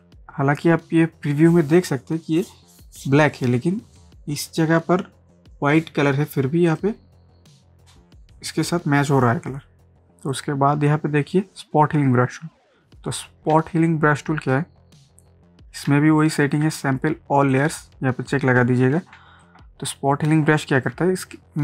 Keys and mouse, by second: 6.7 click, 10.3-13.5 drag, 13.5 ctrl+space, 13.7 ctrl+click, 13.9 ctrl+click, 14.0 ctrl+space, 15.9 ctrl+space, 16.2 ctrl+click, 16.4 ctrl+space, 17.5 click, 19.2 ctrl+space, 19.4 ctrl+click, 19.5 ctrl+click, 19.6 ctrl+space, 21.0 ctrl+space.